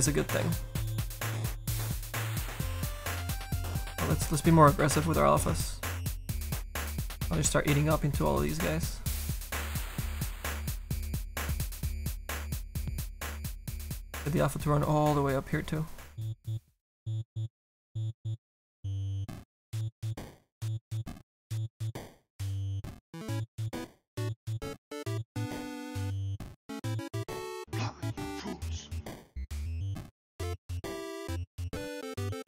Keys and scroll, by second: 2.1 s, 2.5 s.